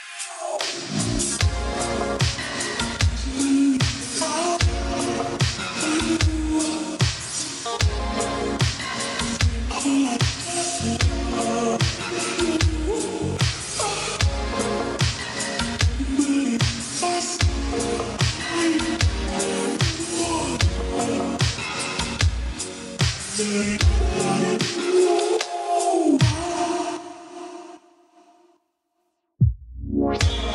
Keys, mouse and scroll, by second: 5.2 click, 20.5 1, 23.3 click, 26.2 Escape, 26.8 click.